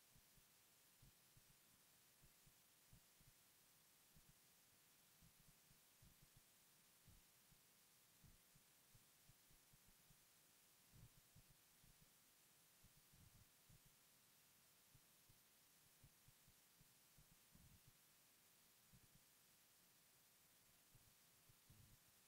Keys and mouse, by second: 0.0-1.9 typing, 0.8 Tab, 2.9 alt+z, 3.8 m, 4.3-6.4 drag, 4.6 m, 5.1-6.0 right drag, 6.9-19.9 drag, 19.3 KP_3, 20.0 m, 21.7 f, 22.1-22.2 drag.